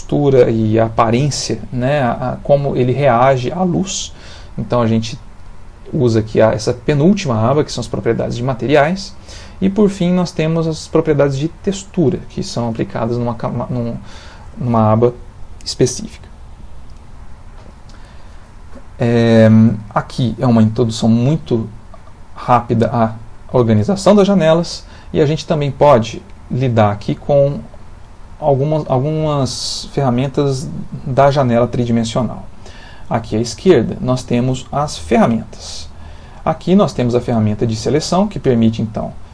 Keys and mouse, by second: 14.0 click, 36.6 click.